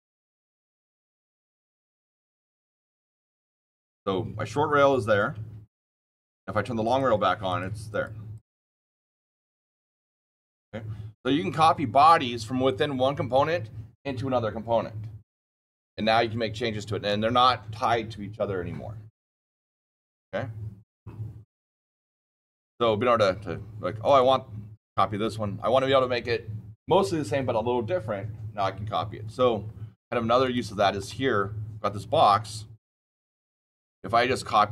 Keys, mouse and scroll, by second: 0.6 click, 1.8 KP_Subtract, 2.1 KP_1, 2.2 KP_2, 2.4 KP_Enter, 3.1-3.6 scroll down 8, 3.6 scroll up 13, 6.8-7.6 click, 7.4 click, 7.8 click, 8.3 click, 24.0 click, 30.3 click, 33.8 click.